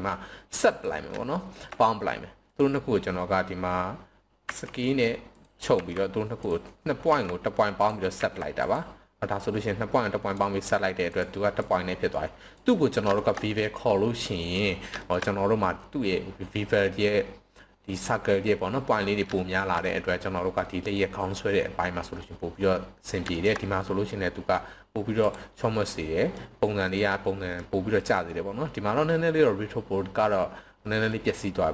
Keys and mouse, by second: 0.5 click, 1.3 shift+middle drag, 2.5-3.5 right drag, 4.4 s, 5.4 drag, 5.7 s, 6.4 click, 7.1 s, 7.8 click, 8.2 s, 8.6 click, 9.4-10.3 drag, 11.7-12.5 drag, 13.1 shift+middle click, 15.0 shift+middle click, 19.4 shift+middle click, 23.3 shift+middle click, 23.8-24.1 middle drag, 25.1 click, 25.9-26.3 middle drag, 26.8 middle click, 27.9-28.3 middle drag, 30.8 middle click.